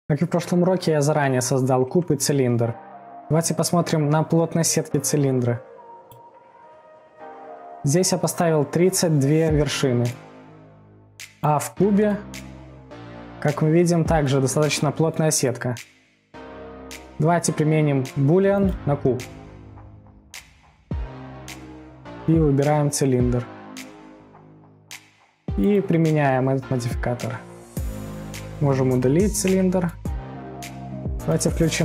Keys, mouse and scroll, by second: 6.3-6.8 drag, 6.8 middle click, 7.0 Tab, 7.4-8.2 scroll up 7, 8.2 scroll down 1, 10.3 scroll down 4, 10.4 middle click, 10.9-11.2 scroll down 1, 11.2 Tab, 11.6 click, 12.1 Tab, 12.4 middle click, 13.1-14.1 scroll up 1, 14.1 scroll up 3, 14.2-14.6 scroll down 2, 14.6-16.0 middle drag, 16.0-16.3 scroll down 3, 16.3 scroll up 3, 16.6 middle click, 17.1 Tab, 18.8-20.0 drag, 21.7-24.7 drag, 24.7-25.8 middle drag, 25.8-28.6 drag, 29.7 Delete, 30.2-30.7 middle drag, 30.6 scroll, 30.7-31.6 scroll up 1, 31.6 scroll up 1, 31.6-31.8 drag.